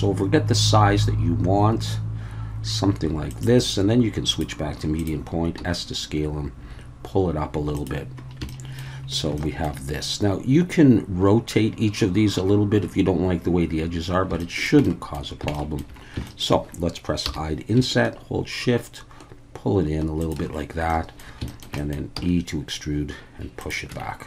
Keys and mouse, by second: 3.3 click, 4.4-5.1 drag, 5.6 s, 7.7 click, 8.5 shift+middle click, 9.4 shift+middle click, 14.4 shift+middle click, 14.8 middle click, 15.5 shift+middle click, 16.3 shift+middle click, 17.3 i, 20.2 shift+click, 20.9 middle click, 21.5 shift+click, 21.6 shift+middle click, 21.8 middle click, 22.2 e, 23.6 click, 23.9 Tab.